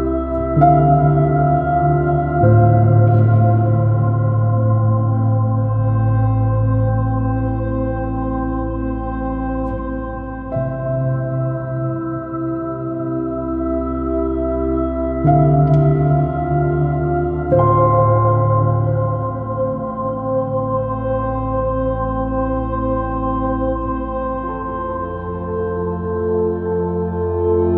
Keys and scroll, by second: 2.2 super+-, 5.8 b, 16.3 super+c, 16.8 super+v.